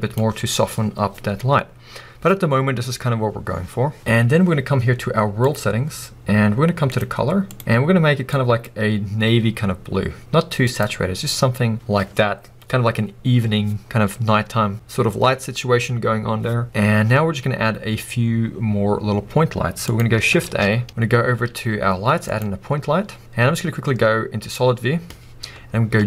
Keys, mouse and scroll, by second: 19.9 click, 20.4 shift+a.